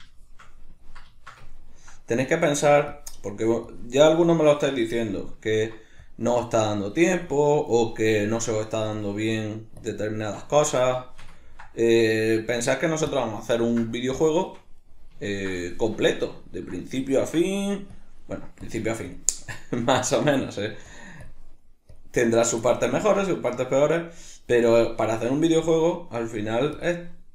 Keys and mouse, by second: 2.2-4.8 drag, 4.8-6.0 shift+middle drag, 6.0-7.8 drag, 7.8-9.0 middle drag, 9.0-10.4 drag, 10.4-12.0 ctrl+middle drag, 12.0-13.6 drag, 13.6-18.0 ctrl+middle drag, 18.0-19.5 drag, 19.5-20.1 shift+middle drag, 20.1-22.2 drag, 22.2-23.9 middle drag, 23.9-25.2 drag, 25.2-26.1 shift+middle drag, 26.1-27.3 drag.